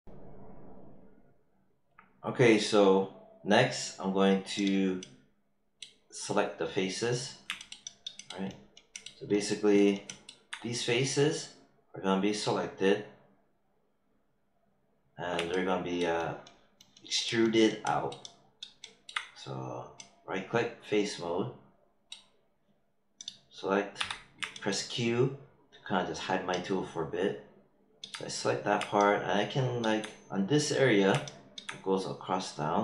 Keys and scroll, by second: 23.9 q.